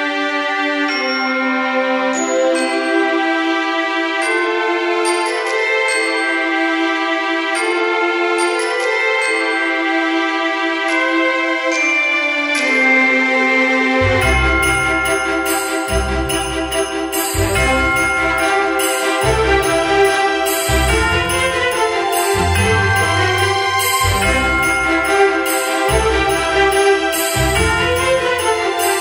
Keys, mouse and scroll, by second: 0.0 v, 4.4 p, 7.2 ctrl+z, 7.8 ctrl+z, 8.1 ctrl+z, 10.5 v.